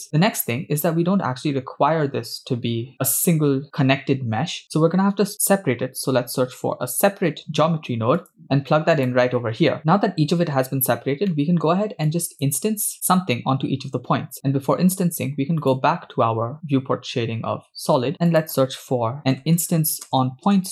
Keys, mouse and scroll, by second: 0.0-0.4 scroll down 6, 0.8-1.5 scroll up 3, 3.7 click, 4.7 shift+a, 11.3-11.7 middle drag, 12.1 click, 15.7 click, 16.8-17.3 scroll down 4, 18.1 shift+a.